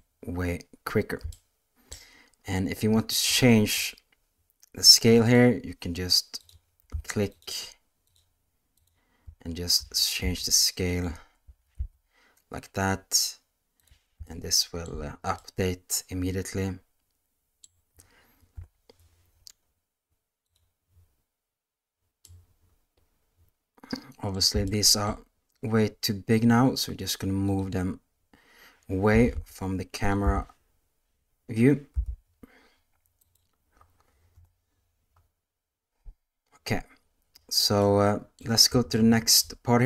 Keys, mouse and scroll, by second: 1.3-1.9 shift+middle drag, 3.3-3.8 shift+middle drag, 5.2 click, 6.3 click, 7.3 shift+click, 8.0 shift+click, 8.7 shift+click, 9.7 s, 11.4 s, 14.2 shift+middle click, 15.3-17.6 middle drag, 18.5 KP_0, 20.4 click, 22.2-24.3 middle drag, 24.6-25.0 shift+middle drag, 25.7 click, 27.4 click, 28.0 middle click, 29.0 g, 30.5 g, 34.3 KP_0, 37.8-38.3 middle drag, 38.9-39.3 shift+middle drag.